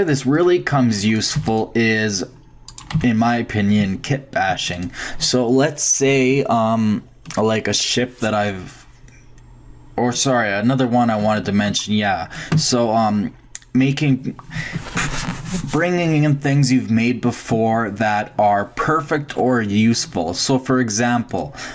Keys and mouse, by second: 1.4 x, 1.9-2.8 drag, 2.9 h, 10.8-12.6 drag, 13.4 shift+click, 19.0-21.0 middle drag, 21.3-21.7 drag.